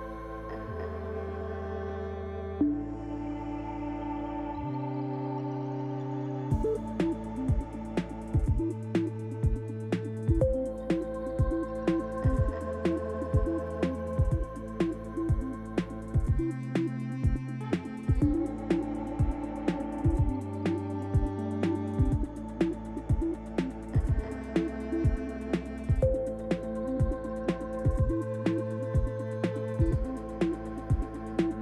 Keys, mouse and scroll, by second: 1.0 l, 2.9 click, 3.5 click, 4.5 click, 5.6 click, 9.6 click, 13.9 click, 14.5 Tab, 15.1 scroll down 1, 16.3 click, 16.3 scroll down 2, 20.8 Tab, 21.1-21.5 scroll up 1, 21.8 click, 23.4 l, 27.5 click, 29.3 click, 29.9 click.